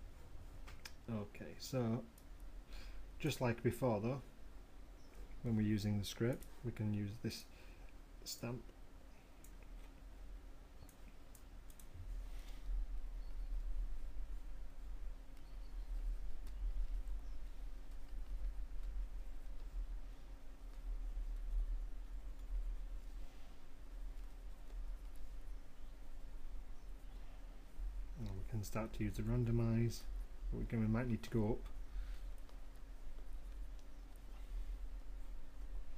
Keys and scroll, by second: 14.6 ], 18.4 m, 34.8 [.